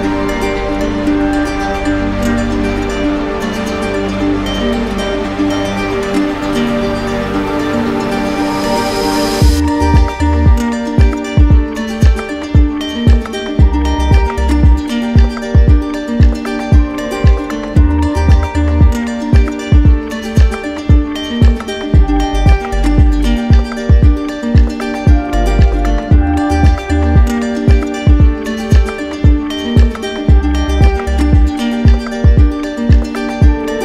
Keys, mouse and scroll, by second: 2.4 alt+click, 2.9 click, 6.5 click, 7.1 click, 7.6 alt+click, 7.7 alt+click, 8.2 click, 8.6 click, 8.8 alt+click, 8.9 ctrl+z, 11.6 click, 11.8 ctrl+z, 14.9 ctrl+z, 14.9 ctrl+click, 17.9 ctrl+z, 17.9 ctrl+click, 23.1 click, 23.3 ctrl+z, 29.2 click, 31.3 click, 31.9 click, 32.5 alt+click, 32.6 alt+click, 33.0 click, 33.7 click.